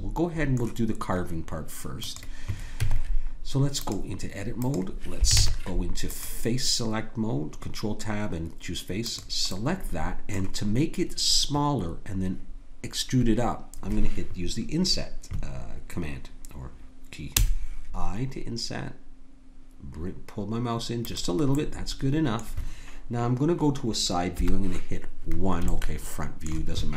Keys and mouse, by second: 2.7 Tab, 4.5-6.7 drag, 5.4 ctrl+Tab, 9.1-12.0 drag, 17.3 i, 21.5-24.3 drag, 24.3 KP_1, 25.9 middle click.